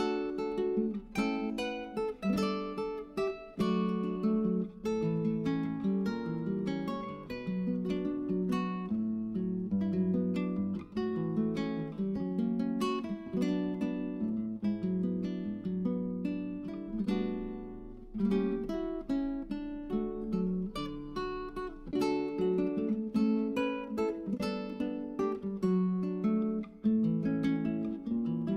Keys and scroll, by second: 4.8-7.3 typing.